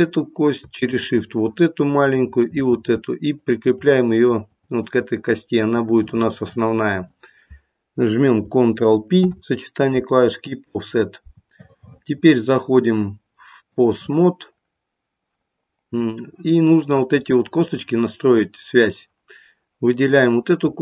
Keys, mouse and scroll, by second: 0.5 click, 0.9 shift+click, 2.0 shift+click, 3.8 shift+click, 9.2 ctrl+p, 12.7 click, 17.1 click.